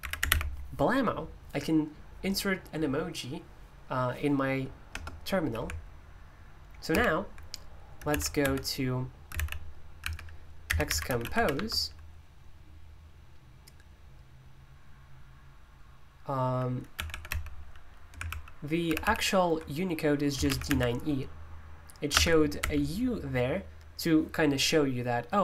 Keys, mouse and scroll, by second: 0.0 typing, 4.9 BackSpace, 6.9 super+h, 7.7-11.8 typing, 16.7-17.7 typing, 18.2 super+l, 18.8 super+h, 20.1-21.1 typing, 22.1 ctrl+BackSpace, 22.3-23.1 typing.